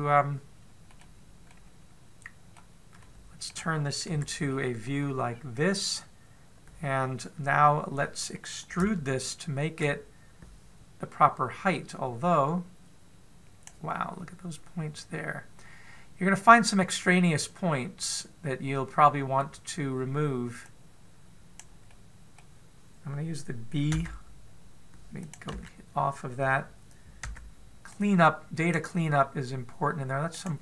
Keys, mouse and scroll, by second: 1.7 middle click, 2.3 middle click, 3.8 middle click, 4.8 KP_1, 5.3-6.1 scroll down 7, 6.1-7.0 scroll up 2, 7.0 scroll up 1, 8.4-8.9 scroll up 2, 8.9 scroll up 2, 9.6 shift+middle click, 12.7 click, 14.7 middle click, 21.4 click, 22.7 middle click, 24.7 b, 26.3 a, 28.0 b.